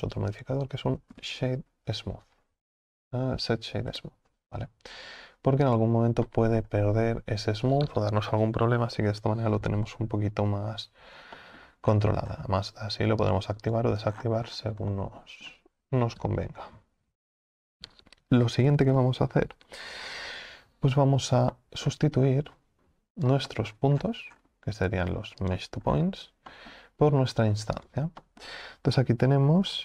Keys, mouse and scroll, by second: 13.3 click, 20.8-21.3 scroll down 1.